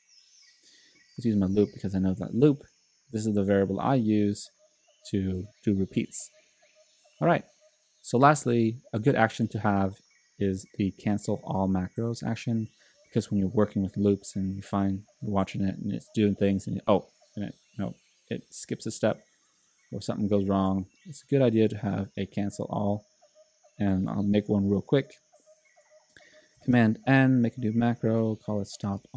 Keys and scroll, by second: 1.1-2.2 typing, 26.7 super+n, 28.0-29.1 typing.